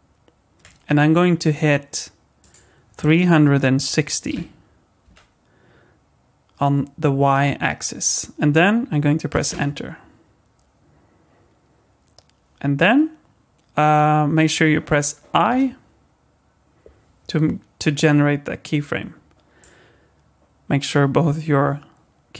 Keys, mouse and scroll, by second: 2.4 click, 15.5 i, 19.6 click.